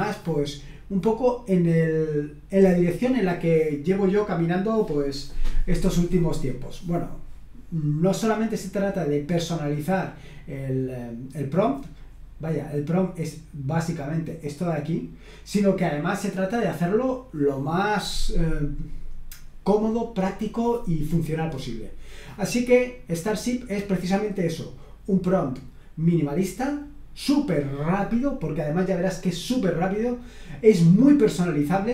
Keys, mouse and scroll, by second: 14.4-16.0 drag, 16.7 click.